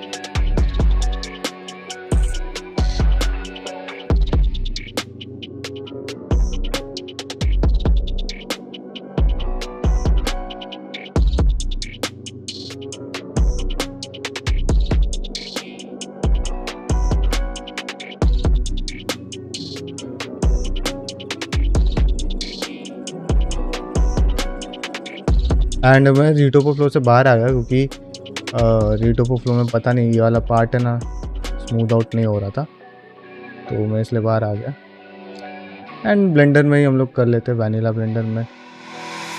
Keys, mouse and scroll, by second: 24.6 g, 24.9 click, 25.0 g, 25.6 click, 25.7 g, 26.1 middle click, 26.7 click, 26.8 g, 27.3 click, 27.4 g, 28.0 click, 28.1 g, 28.9 click, 29.1 middle click, 29.5-33.9 typing, 30.2 click, 31.0 click, 31.5 middle click, 32.4 middle click, 32.7 click, 33.3 click, 33.8 click, 34.3 shift+middle click, 34.6 middle click, 35.7 click, 36.0 shift+click, 36.2 g, 37.4 click, 37.6-39.3 typing, 38.2 click, 38.8 click.